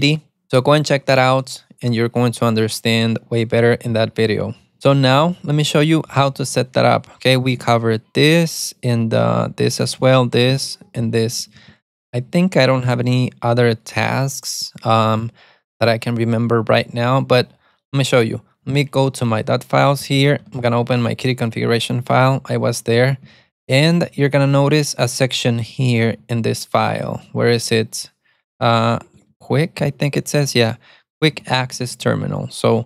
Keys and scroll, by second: 5.4-6.9 typing, 7.7 alt+x, 9.4 alt+x, 10.1 alt+x, 10.6 alt+x, 10.9-14.3 typing, 19.1 ctrl+b, 19.1-21.4 typing, 22.4 ctrl+d, 22.5 ctrl+d, 22.8 ctrl+d, 22.9 ctrl+d, 23.5 ctrl+d, 24.1 ctrl+d, 24.2 ctrl+d, 24.8 ctrl+d, 25.6 ctrl+d, 26.3 ctrl+d, 27.0 ctrl+d, 27.1 ctrl+d, 27.3 ctrl+d, 28.0-30.0 typing, 31.5 Escape, 31.6-32.8 typing.